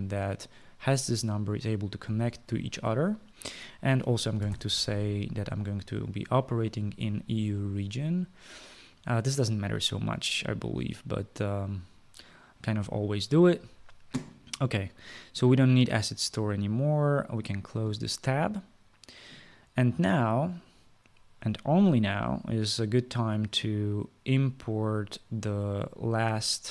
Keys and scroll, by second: 4.9-5.6 typing.